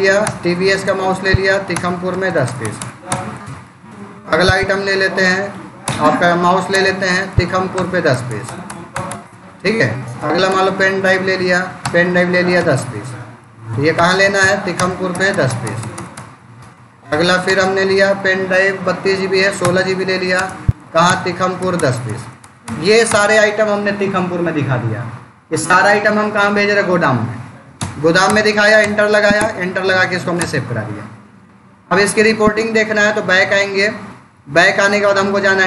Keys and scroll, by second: 0.1 Return, 0.6 space, 1.0 Down, 1.6 Return, 2.0 1, 2.3 Return, 4.0 space, 4.3 Up, 4.4 Down, 4.9 Up, 5.7 Return, 6.6 space, 7.0 Down, 7.6 Return, 8.0 1, 8.3 Return, 9.9 space, 10.4 p, 10.9 Down, 11.7 Return, 12.4 1, 13.8 Escape, 14.3 Down, 14.6 Return, 15.0 1, 15.3 Return, 16.4 space, 16.9 Return, 17.3 space, 17.5 Down, 19.5 Return, 20.2 space, 20.3 Down, 20.9 Return, 21.5 1, 21.8 Return, 27.6 Return, 32.4 Escape, 34.2 Down.